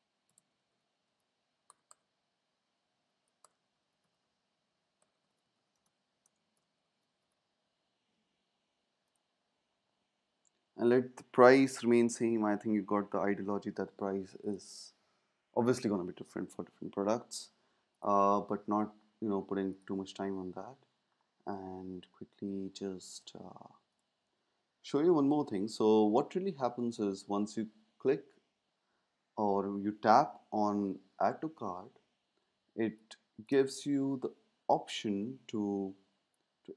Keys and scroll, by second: 0.0-1.8 typing, 3.4-7.6 typing.